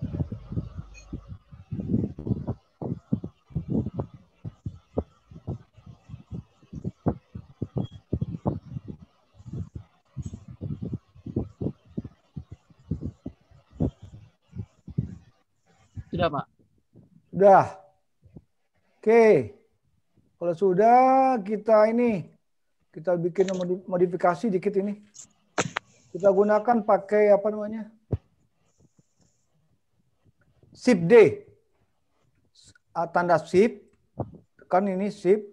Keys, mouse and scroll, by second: 0.5 click, 2.4 middle click, 5.2 click, 6.8 middle click, 9.5 middle click, 11.2 middle click, 13.0 middle click, 15.6-16.2 scroll up 4, 16.4-16.8 scroll down 2, 17.2 middle click, 24.4 scroll up 1.